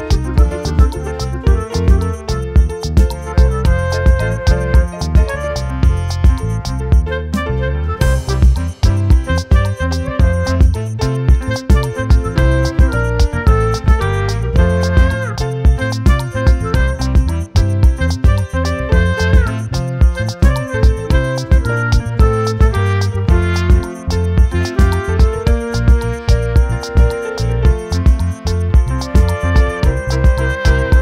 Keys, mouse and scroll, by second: 1.6 click, 2.1 click, 4.6 click, 5.5 click, 5.6-7.4 scroll up 4, 9.9 click, 14.4-14.8 ctrl+drag, 16.1-17.1 ctrl+drag, 18.1-18.9 ctrl+drag, 19.4-20.2 ctrl+drag, 21.2 ctrl+click, 25.2 click, 26.1-26.9 scroll down 2, 26.9 shift+right click.